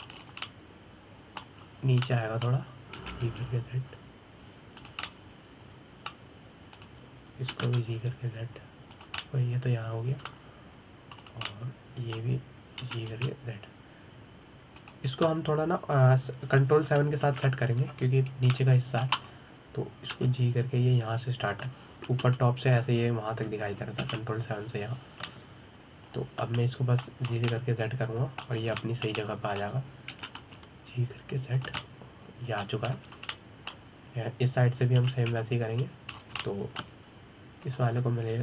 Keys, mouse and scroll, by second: 1.8 scroll up 2, 2.1-3.3 middle drag, 3.3-3.7 scroll down 2, 3.7 middle click, 4.6 g, 6.7-8.4 middle drag, 8.4 click, 9.2 g, 10.9-12.9 middle drag, 12.9 drag, 13.2-14.5 middle drag, 14.5 g, 18.9 ctrl+KP_7, 20.2 shift+middle click, 20.9-21.8 scroll up 1, 21.8 g, 23.9 KP_7, 25.7 ctrl+KP_7, 26.9-29.0 middle drag, 29.0 scroll down 2, 29.2-30.2 middle drag, 30.2 scroll up 2, 30.5-31.8 shift+middle drag, 31.8 g, 33.5-34.6 middle drag, 34.6-35.0 scroll down 5, 35.0-36.7 middle drag, 36.7 ctrl+KP_7, 37.8 scroll up 3, 38.1-38.4 shift+middle drag.